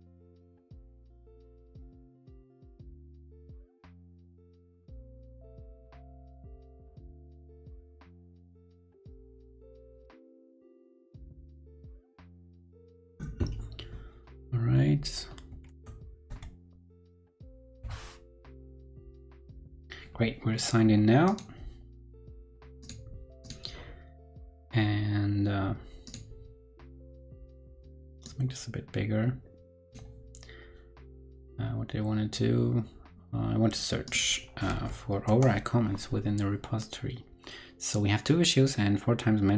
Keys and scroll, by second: 34.7 super+v.